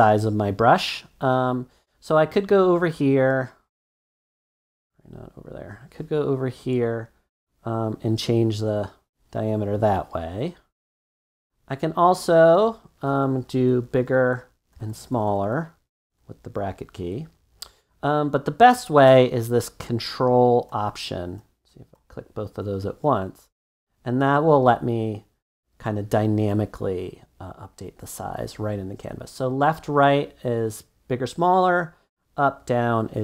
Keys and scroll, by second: 13.1-16.4 typing, 18.1 typing.